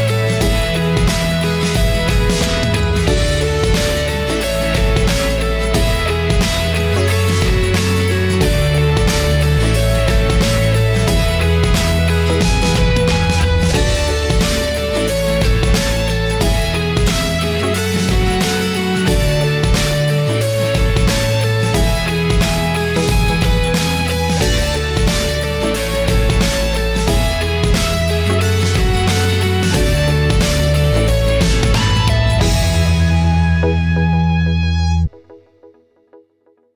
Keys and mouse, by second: 1.4-4.8 drag, 5.7-8.4 drag, 9.2 middle click, 10.7 middle click, 11.6 click, 13.1 click, 14.2-15.8 drag, 15.8 middle click, 19.7-20.2 shift+middle drag, 21.9 middle click, 31.7-32.9 drag, 33.9-35.0 drag, 35.6-36.7 drag.